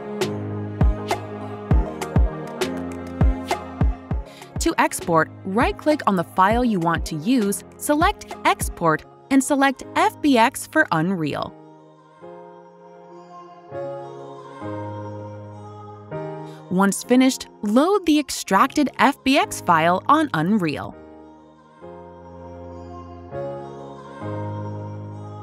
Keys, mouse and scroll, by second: 3.7 alt+click, 3.7-5.6 alt+scroll, 5.6 right click, 7.1 click, 8.9 click, 10.0 click, 12.0 click, 12.5-15.3 typing, 16.4 click, 19.2 right click, 21.4 click.